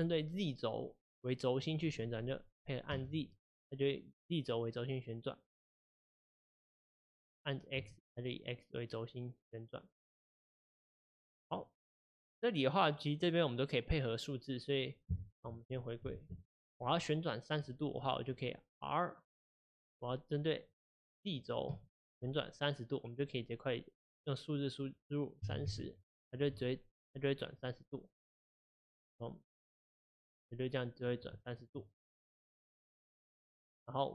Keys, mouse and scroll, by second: 11.6 click, 15.8 click, 16.1 alt+r, 16.5 click, 19.4 r, 30.1-33.4 middle drag, 33.4 click.